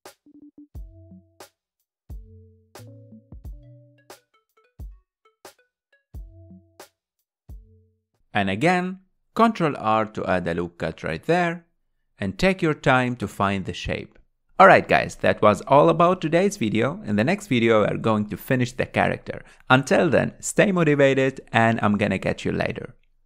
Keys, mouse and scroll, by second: 0.0 middle click, 0.4 click, 0.5 middle click, 1.2 g, 2.1 middle click, 2.6 click, 3.5 click, 3.5 g, 4.3 click, 4.5 g, 5.1 click, 5.5 g, 5.7 middle click, 6.0 click, 6.1 g, 6.7 middle click, 7.0 click, 7.2 g, 7.6 middle click, 8.0 click, 8.0 g, 9.5 ctrl+r, 11.0 middle click, 11.6-12.8 drag, 12.8 g, 14.3 click, 14.3-14.7 middle drag, 14.7 scroll down 3, 15.0 Tab, 15.2-18.2 middle drag, 18.2 scroll down 1, 18.5-20.4 middle drag, 20.4 click, 21.5 Tab, 22.1 a.